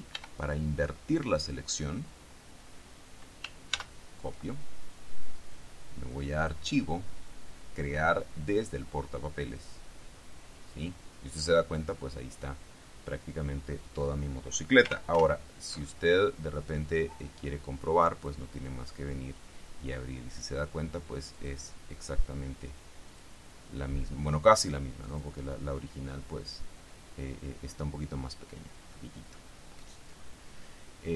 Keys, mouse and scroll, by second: 0.3 ctrl+i, 3.9 ctrl+c, 6.5 click, 9.7 click, 15.3 ctrl+alt+o, 18.3 click, 21.5 click, 23.3 click, 25.2 click, 26.6 click.